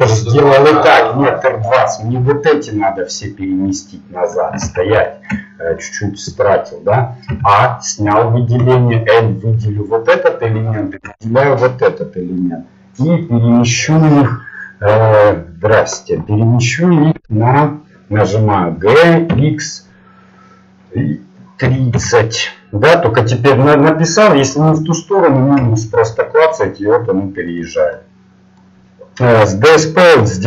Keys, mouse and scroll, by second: 3.1-3.5 scroll up 1, 3.7-7.3 middle drag, 4.6 ctrl+z, 7.3 a, 8.6 l, 9.2 middle click, 10.6-14.8 right drag, 18.7 g, 28.0 middle click.